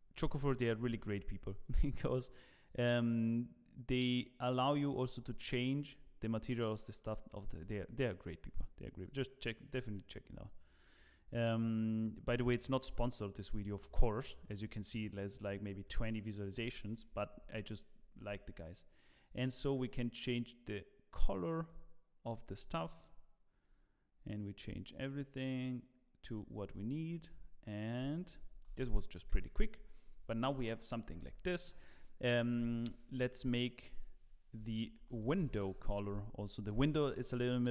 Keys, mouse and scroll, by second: 1.6 middle click, 1.6 click, 1.6 scroll up 5, 15.8 middle click, 16.7 shift+middle click, 17.3-17.9 scroll up 5, 17.9-18.4 scroll down 10, 19.1 click, 21.5 click, 27.3-27.8 scroll down 3, 27.6 middle click, 28.1 shift+middle click, 28.7 ctrl+s, 29.3 KP_0, 30.3 scroll down 1, 31.5 scroll up 1, 32.1 click, 32.1 scroll up 1, 33.5 click, 34.2 click, 34.7 click, 37.0-37.7 scroll down 3.